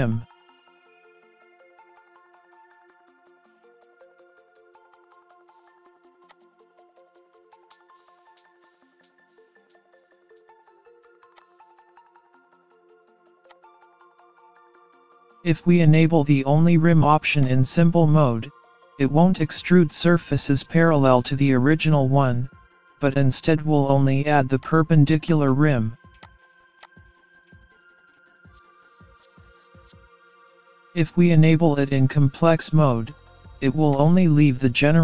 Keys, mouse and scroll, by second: 0.6 middle click, 1.8 scroll down 4, 2.0 middle click, 3.5-4.3 scroll up 2, 3.7 middle click, 4.8 middle click, 6.3 click, 10.3-11.2 scroll down 4, 10.6-11.2 scroll up 1, 11.4 click, 12.3 scroll up 1, 12.5 middle click, 13.5 click, 14.1 middle click, 17.5 click, 18.6 middle click, 20.2-20.6 scroll down 4, 20.6-21.4 scroll up 4, 21.4 scroll down 1, 21.8 middle click, 24.7 click, 25.3 click, 26.2 click, 26.9 click, 27.9 middle click, 32.5 click, 34.9 middle click.